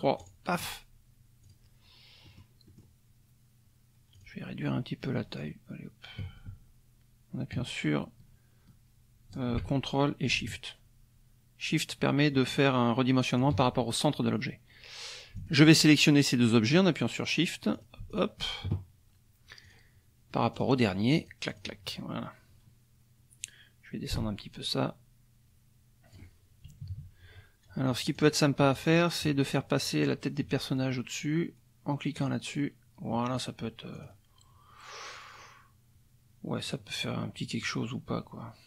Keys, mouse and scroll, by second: 0.2 shift+click, 1.4 click, 2.2 click, 2.7 click, 4.1 click, 5.4-13.6 shift+drag, 15.4 shift+click, 16.6 click, 17.7 click, 18.1 shift+click, 19.6 click, 20.5 click, 21.2 click, 21.5 click, 24.1-26.3 ctrl+drag, 26.8 KP_Subtract, 28.2 click, 28.7 click, 32.2 click, 33.9 click, 36.7-37.8 drag.